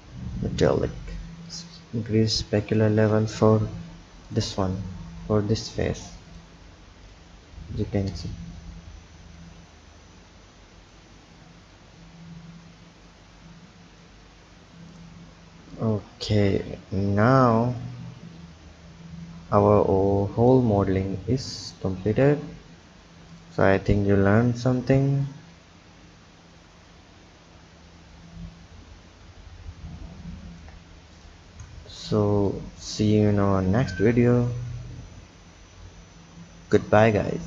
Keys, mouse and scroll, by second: 1.6-3.9 drag, 3.9 Tab, 4.4 click, 6.4 click, 7.1 click, 8.2 Tab, 9.5-14.8 drag, 15.0 drag, 15.9 click, 20.8 shift+a, 22.2 s, 25.4 click, 31.3 click, 32.6-35.9 drag.